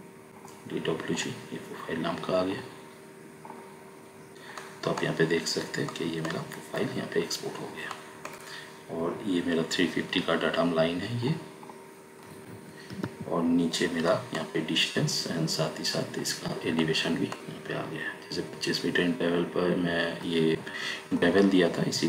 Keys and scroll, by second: 12.7 Escape.